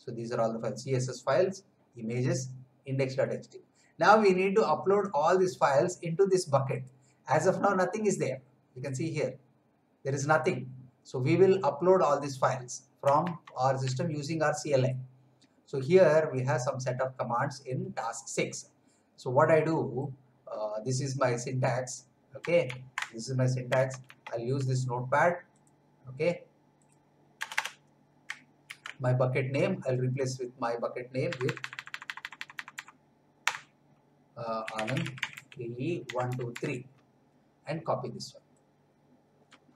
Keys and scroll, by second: 13.4 alt+Tab, 22.6 ctrl+c, 23.9 alt+Tab, 27.4 Return, 29.8 ctrl+v, 31.2 BackSpace, 34.4-37.0 typing.